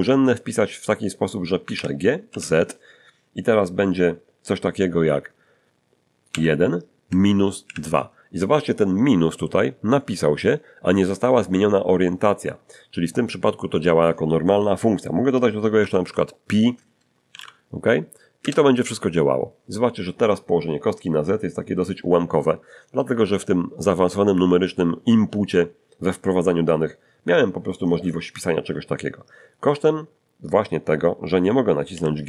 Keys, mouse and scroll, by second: 1.7 g, 2.3 z, 6.3 1, 7.1 -, 7.6 2, 15.8 shift+=, 17.3 p, 18.4 Return, 31.9 g.